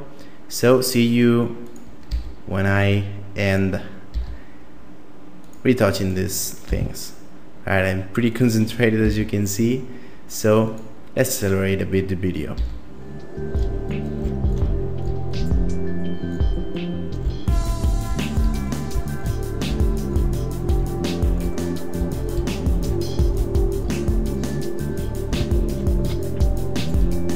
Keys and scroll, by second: 2.1 e, 4.1 e, 6.7 g, 9.0 e, 12.5 e, 13.7-15.4 typing, 17.3-24.1 typing, 25.3 g, 26.4-27.3 typing.